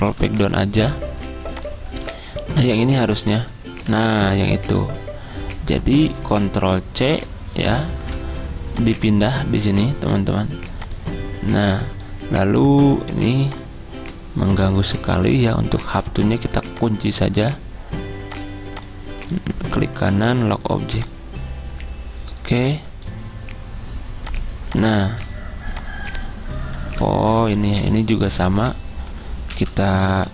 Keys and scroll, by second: 0.1 ctrl+Page_Down, 0.2 ctrl+Page_Down, 4.1 ctrl+z, 7.8 ctrl+c, 27.2 ctrl+z, 29.6 ctrl+Page_Down, 29.8 ctrl+Page_Down, 30.0 ctrl+Page_Down, 30.2 ctrl+Page_Down.